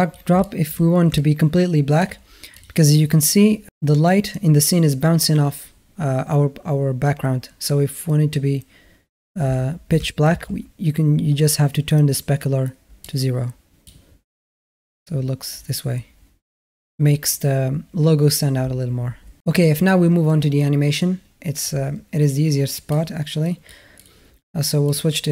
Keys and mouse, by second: 0.2 shift+a, 0.2-0.5 alt+shift+drag, 0.3 shift+a, 1.0-1.8 alt+middle drag, 2.4 click, 9.8 shift+a, 10.0 middle click, 13.0 click, 22.9 click, 23.9 click, 25.0-25.3 drag.